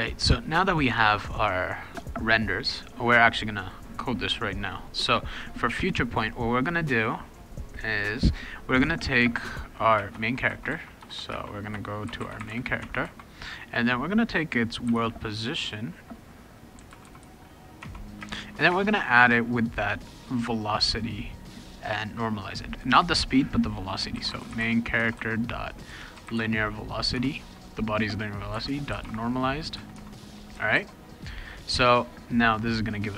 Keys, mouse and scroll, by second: 1.9 click, 3.5 click, 4.8 click, 5.0 Return, 6.6 click, 7.7 click, 9.9-13.0 typing, 14.6-15.4 typing, 16.5-18.2 typing, 17.8 Tab, 23.9-26.9 typing, 27.1 Tab, 28.3-29.5 typing, 29.9 Tab, 30.7 ctrl+s.